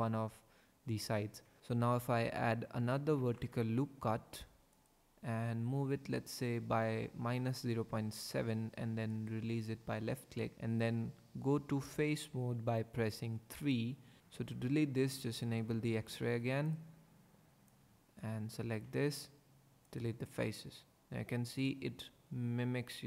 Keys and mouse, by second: 1.6 ctrl+r, 3.2 ctrl+r, 4.7 click, 9.1 click, 11.8 3, 13.6 click, 15.5 click, 18.8 x, 21.5 click.